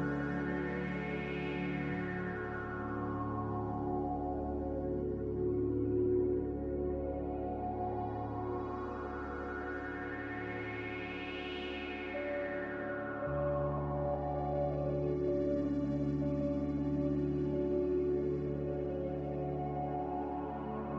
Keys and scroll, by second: 1.4 m.